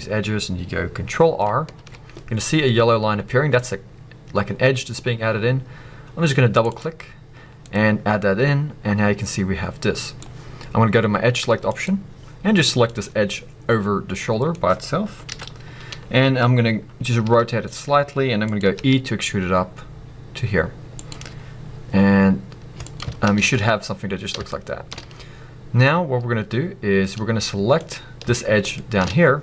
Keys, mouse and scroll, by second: 6.7 click, 7.3-7.6 scroll down 1, 7.6-13.0 middle drag, 13.0 click, 13.3-15.3 middle drag, 15.3 KP_1, 16.0-17.2 scroll up 2, 18.5 click, 21.1 click, 21.2-21.9 scroll down 1, 22.9 click, 23.3 ctrl+z, 24.1 scroll down 1, 24.5-27.7 shift+middle drag, 27.7 click, 28.3-29.0 shift+middle drag, 29.0-29.4 shift+scroll up 3.